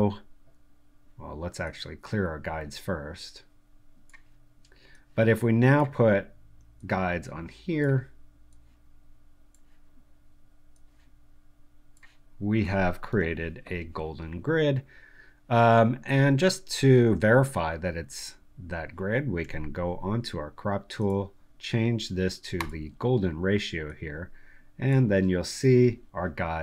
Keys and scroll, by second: 13.1 Delete, 19.4 c.